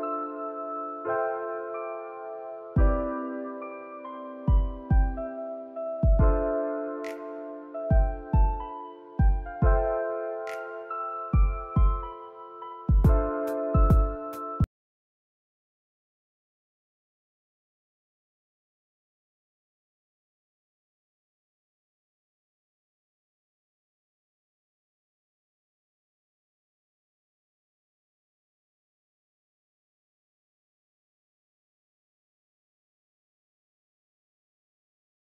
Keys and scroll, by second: 1.6 ctrl+s, 5.4 n, 11.5 space, 22.1 ctrl+s, 35.2 space.